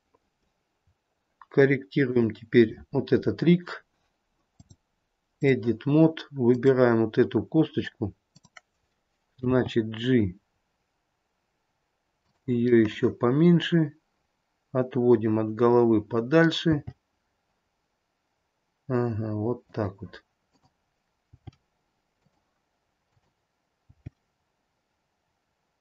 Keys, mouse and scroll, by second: 2.2 click, 3.3-4.7 scroll up 5, 4.7 click, 6.7 click, 9.6 g, 13.0 middle click, 16.8 g, 20.6 click, 21.4 g, 23.2 click, 24.0 g.